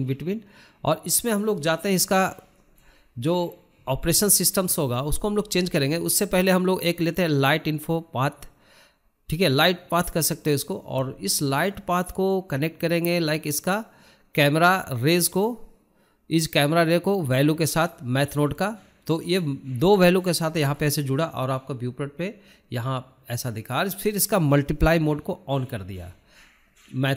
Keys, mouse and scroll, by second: 0.0 click, 2.7 shift+middle click, 3.2 scroll down 1, 3.4-7.9 shift+middle drag, 8.8-9.2 scroll down 2, 9.2-12.3 shift+middle drag, 12.3 click, 12.6 click, 18.9-19.3 scroll down 1, 19.3 shift+middle click, 19.6-20.0 scroll up 1, 20.0-22.6 shift+middle drag, 22.6-24.4 drag, 24.4-24.8 scroll down 4, 24.8 shift+middle click, 25.0-25.6 scroll up 5, 25.6-27.1 shift+middle drag.